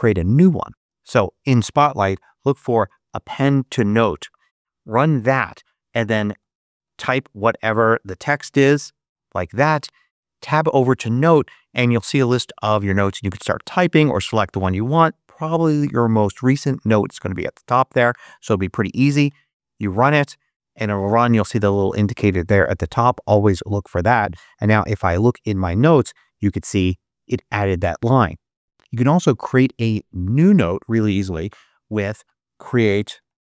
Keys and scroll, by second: 1.7 super+a, 1.8-4.0 typing, 4.3 Return, 6.0-7.2 typing, 8.5 ·, 9.6 Tab, 19.1 Return, 31.4 super+space, 32.4-33.4 typing.